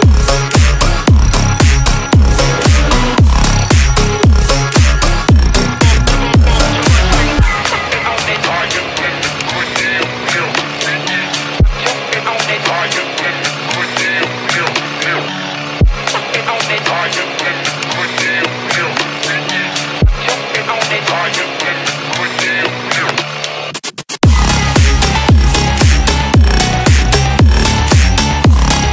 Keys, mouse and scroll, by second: 1.2-2.0 drag, 2.6 click, 5.3-6.2 drag, 7.1 click, 7.3-8.8 drag, 9.3-9.9 drag, 11.8 click, 12.5-14.3 drag, 15.7 middle click, 17.0-17.5 drag, 18.0-18.7 drag, 19.6 click, 22.1 middle click, 23.6 shift+a.